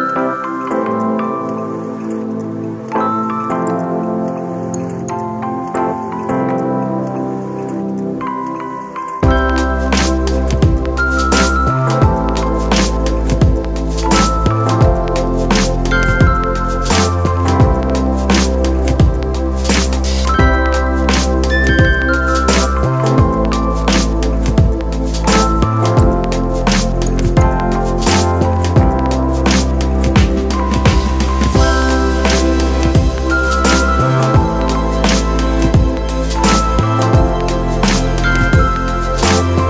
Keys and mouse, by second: 0.5 ctrl+alt+shift+e, 4.4 shift+click, 5.7 shift+click, 9.1-12.1 shift+drag, 15.7-24.9 shift+drag, 24.9-29.7 shift+drag, 35.0-39.6 shift+drag.